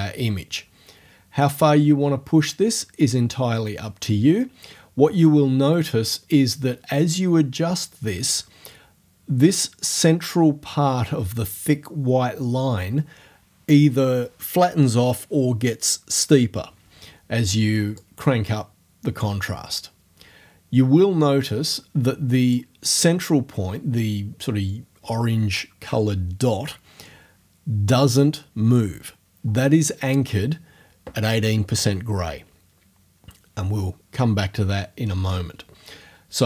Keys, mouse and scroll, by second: 0.0-8.5 drag, 18.0-22.7 drag.